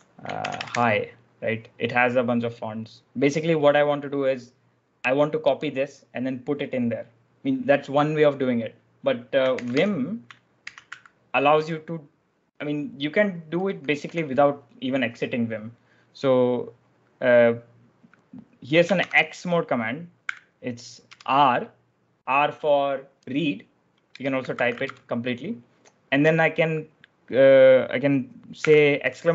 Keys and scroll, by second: 0.0-0.9 typing, 9.4 ctrl+j, 9.6 k, 10.5 ctrl+j, 10.8 z, 13.5 k, 18.9 shift+;, 20.1 r, 21.0 space, 23.9-25.1 typing, 28.5 shift+1.